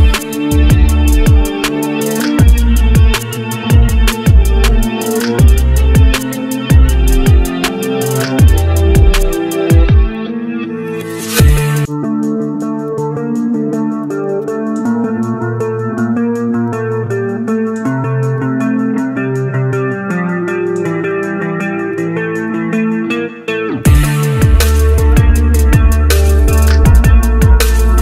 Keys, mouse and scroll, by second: 2.1-2.5 scroll up 1, 6.5 scroll down 1, 8.8 scroll up 1, 16.9 double click, 17.7-18.0 scroll down 1, 18.0 scroll up 1, 21.7 double click, 26.9-27.8 scroll down 1, 27.8-28.0 scroll up 1.